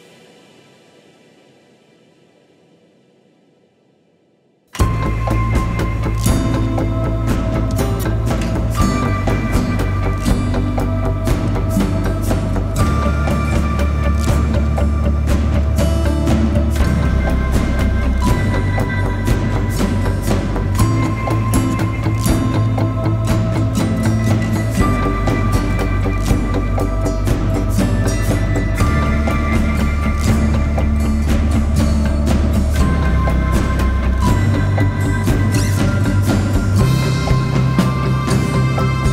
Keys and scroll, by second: 5.3 ctrl+d, 5.4 Escape, 6.5 ,, 11.9 F9, 14.6 2, 16.6 ctrl+d, 16.7 Escape, 24.4 ], 27.4 ], 29.5 4, 30.1 shift+i, 30.4 2, 35.0 Escape, 38.9 ].